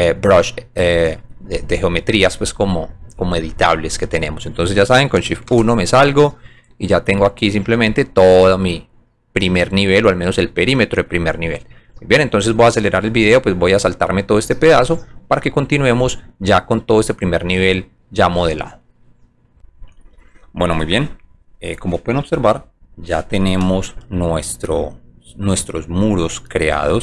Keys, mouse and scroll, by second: 0.5 alt+middle click, 6.2 alt+middle click, 7.1 alt+click, 7.8 alt+click, 8.3-10.4 alt+drag, 19.5 click, 23.7 click, 24.7 alt+click, 25.6 alt+click, 26.0 alt+middle click, 26.9 alt+click.